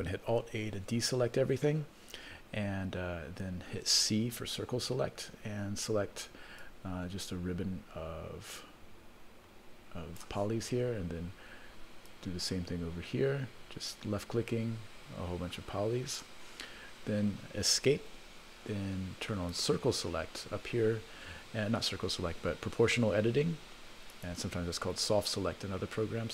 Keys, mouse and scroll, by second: 0.3 alt+a, 4.3 c, 19.5 click, 24.1-26.3 drag.